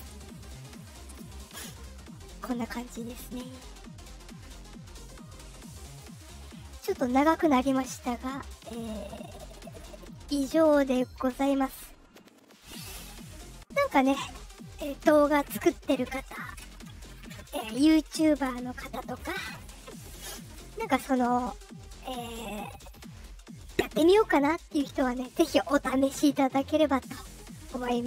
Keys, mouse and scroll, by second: 1.3 click, 4.4 click, 5.8 click, 7.8 click, 9.5 click, 10.9 click, 12.4 click.